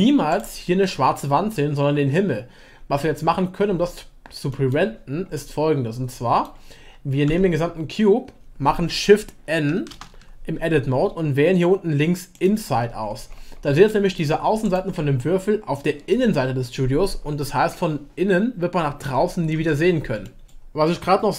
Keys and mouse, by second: 4.5-4.9 middle drag, 5.3-7.3 middle drag, 7.3 a, 9.9 shift+n, 12.3 click, 13.9 middle click, 19.5 Tab, 20.2 click.